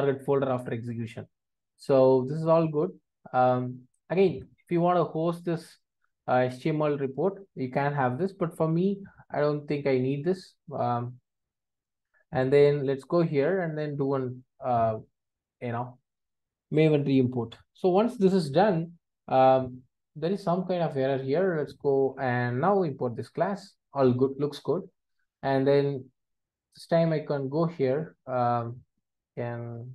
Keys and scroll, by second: 11.9 super+s, 22.1 alt+Return.